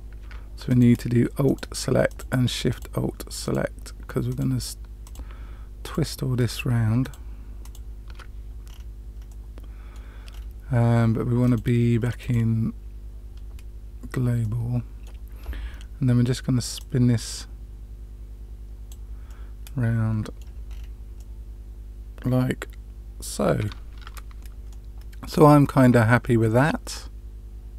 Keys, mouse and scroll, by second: 0.6 alt+shift+click, 1.4 alt+shift+click, 2.0 alt+shift+click, 2.6 alt+shift+click, 3.4 alt+shift+click, 4.2 alt+shift+click, 5.0 alt+shift+click, 5.8 alt+shift+click, 6.4 alt+shift+click, 7.0 alt+shift+click, 7.6 alt+shift+click, 8.6 scroll up 1, 8.7-9.2 scroll down 2, 9.3 middle click, 10.3-10.7 scroll down 2, 11.4-13.0 drag, 14.4-15.0 middle drag, 16.7-18.9 drag, 19.2-20.3 middle drag, 20.6-21.6 scroll down 3, 21.1-23.6 middle drag, 24.0 Tab, 24.6-27.7 middle drag.